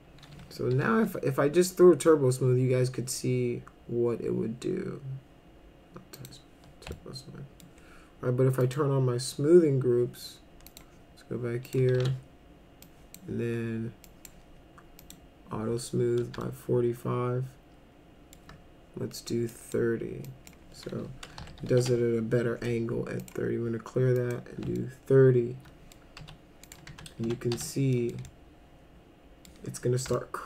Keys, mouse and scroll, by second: 0.8 t, 6.1 click, 6.9 alt+middle click, 8.6 click, 10.7 click, 11.7 click, 11.9 ctrl+a, 12.8 click, 14.1 click, 15.0 click, 16.4-18.4 alt+middle drag, 19.5 click, 20.2 click, 21.1-22.1 typing, 23.2 click, 24.2 click, 24.8-25.9 alt+middle drag, 26.2 F4, 26.7 click, 26.9 F3, 27.2 F3, 27.5 F4, 27.9 middle click, 28.3-29.5 alt+middle drag, 30.1 alt+middle click.